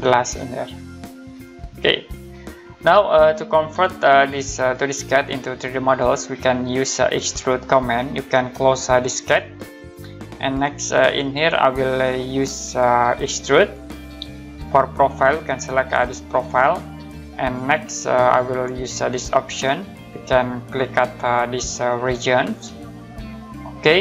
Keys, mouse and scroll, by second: 1.8 scroll down 1, 3.1 middle click, 4.6 click, 7.4 scroll up 1, 9.2 click, 10.3 middle click, 10.8-12.5 scroll up 1, 13.5 click, 16.3 click, 19.4 click, 22.0 click.